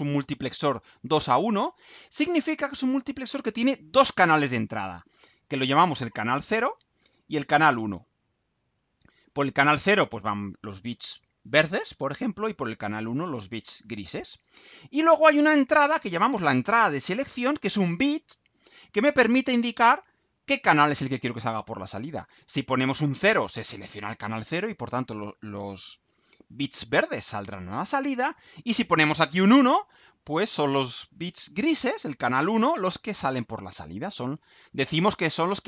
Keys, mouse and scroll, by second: 15.1 scroll down 2.